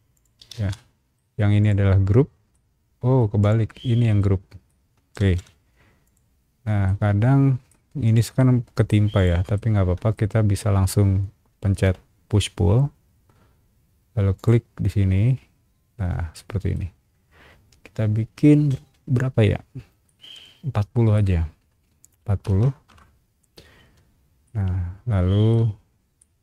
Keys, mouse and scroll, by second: 0.1 shift+click, 0.5 space, 0.7 middle click, 1.6 click, 2.5 middle click, 3.4 click, 4.2 middle click, 5.2 ctrl+z, 6.0 click, 6.8 middle click, 8.0 click, 8.3 middle click, 9.1 click, 9.5 shift+middle click, 11.8 p, 14.3 click, 16.3 middle click, 19.5 scroll down 1, 20.0-21.1 middle drag, 22.2 KP_4, 22.4 KP_0, 22.9 KP_Enter, 23.8 space, 24.1 scroll up 1, 24.4-25.5 middle drag, 25.8 scroll up 1, 26.2 middle click.